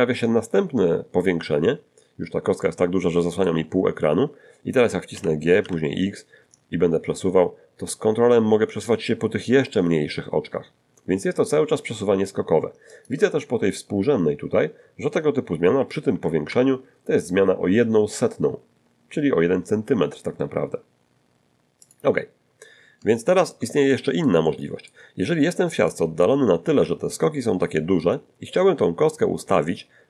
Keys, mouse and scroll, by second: 1.6-1.9 scroll down 2, 2.6-3.6 shift+drag, 3.7 shift+scroll up 2, 5.1 g, 5.6 x, 12.9 ctrl+click, 15.8 g, 16.1 x, 21.8 ctrl+click, 22.3-22.9 ctrl+scroll down 3, 23.1-23.7 shift+scroll up 1, 23.9-25.1 shift+middle drag, 25.9-30.0 drag.